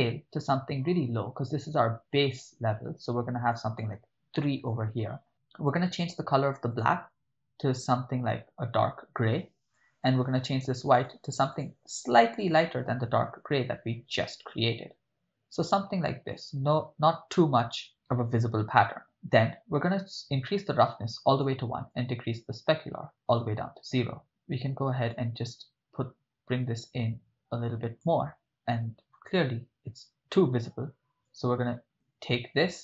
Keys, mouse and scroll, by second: 0.4 click, 1.1-3.5 drag, 3.6-4.6 drag, 6.0 click, 6.7 click, 11.0 click, 18.8 middle click, 20.3-21.5 drag, 21.9-23.4 drag, 24.2 middle click, 25.1-28.1 drag, 31.3 click.